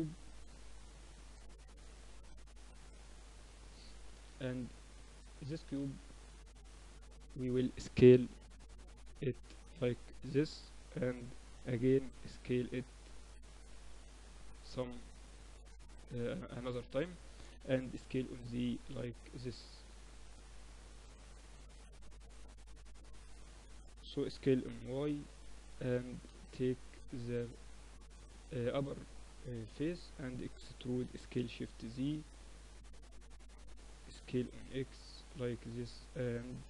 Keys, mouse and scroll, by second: 0.5-2.8 middle drag, 2.8-4.6 drag, 3.5-6.3 middle drag, 4.9-7.7 drag, 6.7 middle click, 6.9 z, 8.4 s, 10.1-14.1 drag, 13.7 s, 16.0-17.9 drag, 17.5 s, 19.5-21.3 drag, 22.3 KP_7, 24.3-25.5 middle drag, 24.3 s, 26.0 Tab, 26.3 z, 27.1 click, 27.5-31.1 middle drag, 29.7 KP_7, 31.1 e, 34.3 s, 35.9-36.6 middle drag.